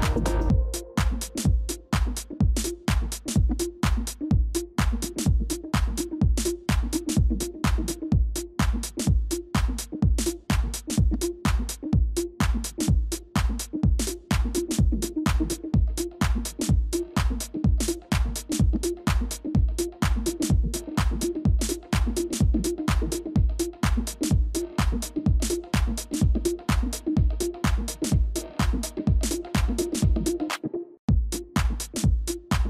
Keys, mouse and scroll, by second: 1.0 alt+click, 8.8 ctrl+c, 10.6 ctrl+f, 13.7 shift+click, 19.7 alt+click, 21.2 v, 25.3-26.0 typing, 32.4 ctrl+[.